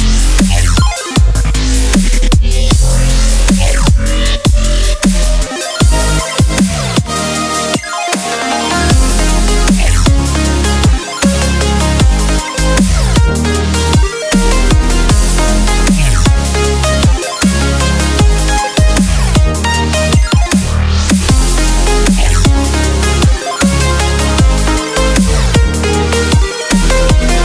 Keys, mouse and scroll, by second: 0.0 click, 0.9-6.1 middle drag, 6.6 Tab, 7.7-8.8 drag, 9.0 click, 11.1 click, 13.7-14.6 middle drag, 15.9-16.9 middle drag, 17.9-18.9 middle drag, 20.4 middle drag, 21.0-22.1 middle drag, 22.6-23.0 middle drag, 23.0 right drag, 23.9 middle click, 24.9 click, 27.2 click.